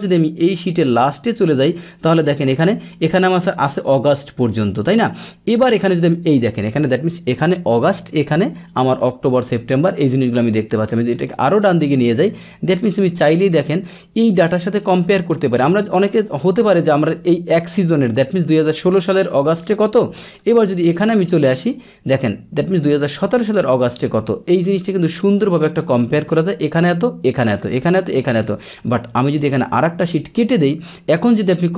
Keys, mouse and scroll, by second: 0.2-2.5 drag, 5.5 click, 7.3 click, 8.2 click, 9.0 click, 9.4 click, 9.9 click, 11.1 click, 11.5 click, 12.2 click, 12.7 click, 13.0 click, 13.5 click, 14.5 click, 15.4 click, 16.0 click, 20.2 click, 20.4 click, 20.6 click, 21.0 click, 23.7 click, 25.2 click, 26.2 click, 26.9 click, 27.4 click, 28.1 click, 28.5 click, 29.5 click, 30.8 click.